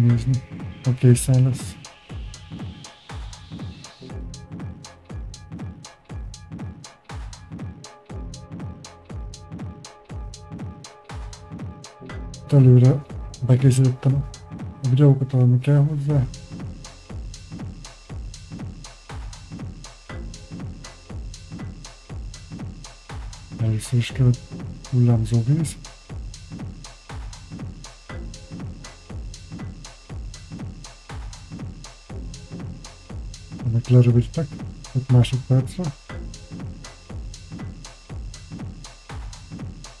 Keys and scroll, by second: 38.9-40.0 typing.